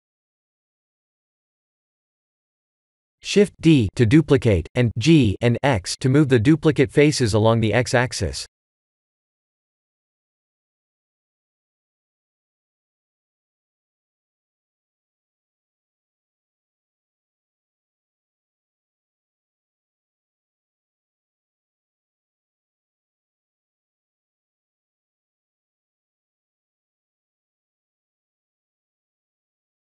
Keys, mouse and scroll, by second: 0.1 middle click, 0.4 shift+z, 1.0 3, 1.5 b, 5.6 shift+d, 11.7 middle click, 12.8 click, 13.4 shift+z, 13.8 click, 14.2 middle click, 15.3 Tab, 15.7 middle click, 19.2 click, 19.5 middle click, 21.3 KP_1, 22.1 shift+a, 25.2 s, 27.1 g.